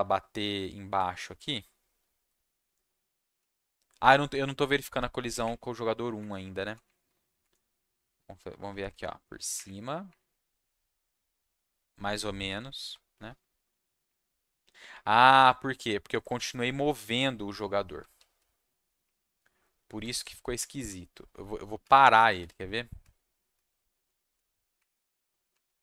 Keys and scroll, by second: 0.0-0.2 typing, 1.6 s, 1.9 s, 3.1 s, 4.6 Up, 4.9 Down, 5.4 Up, 6.3 Down, 6.8 Up, 7.5 Down, 8.1 Down, 8.4 Down, 8.7 Down, 8.9 Down, 9.5 Up, 10.0 Up, 12.6 Down, 13.1 Up, 14.9 Up, 15.3 Down, 16.1 Up, 17.6 w, 18.1 s, 20.0 Down, 20.5 Down, 20.8 Down, 21.8 Down, 22.1 Down, 22.3 Down, 23.0 Down, 23.5 Down, 24.0 Down, 24.3 Down, 24.7 Up, 25.5 Down.